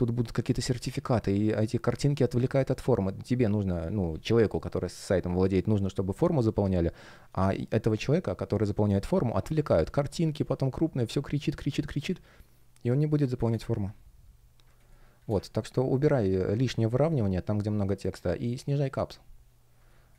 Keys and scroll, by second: 6.4 space, 9.4 space, 11.8 space, 14.7 space, 19.8 space.